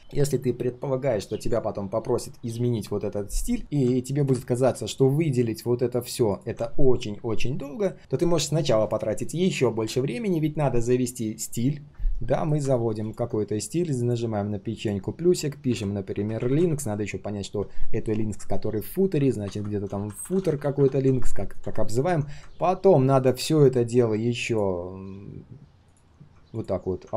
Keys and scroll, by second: 3.1 ctrl+shift+3.